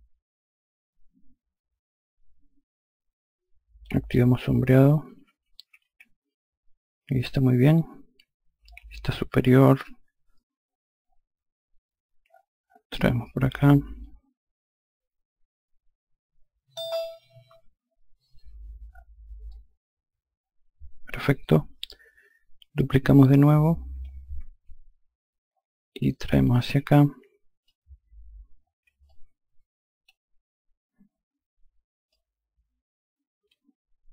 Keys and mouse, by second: 4.9 n, 9.2 F2, 13.9 click, 17.4 F1, 19.4 alt+click, 23.1 ctrl+click, 26.3 click, 28.9 alt+click, 32.0 click.